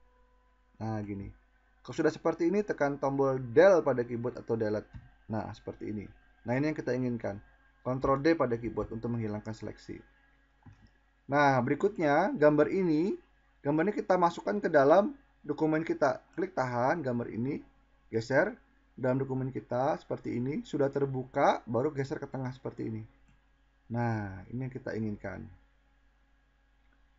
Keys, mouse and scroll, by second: 2.4 Delete, 10.3 click.